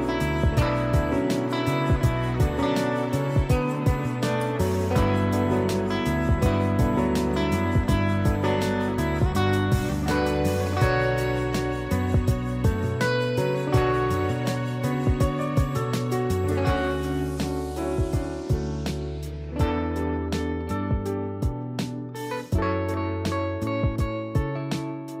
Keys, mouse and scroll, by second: 0.0 z, 0.3 click, 2.1 space, 2.4 click, 2.7 space, 3.8 click, 4.2 space, 4.4 click, 4.7 space, 7.4 click, 14.5 click, 17.3 click, 20.8-22.1 typing, 22.5 click, 25.0-25.2 typing.